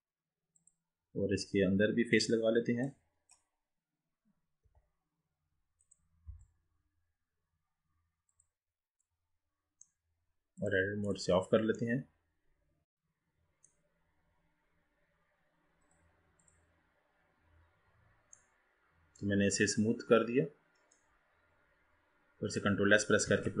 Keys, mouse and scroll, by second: 2.2 click, 5.1 i, 6.7 i, 9.1-10.7 middle drag, 10.7-12.0 drag, 12.0-14.3 middle drag, 14.3-15.3 scroll down 3, 15.3-15.9 scroll up 2, 15.9-17.9 right drag, 17.9-18.5 scroll down 3, 18.5-19.4 middle drag, 19.4-20.0 scroll down 3, 20.0-21.1 scroll up 5, 21.1-23.6 middle drag.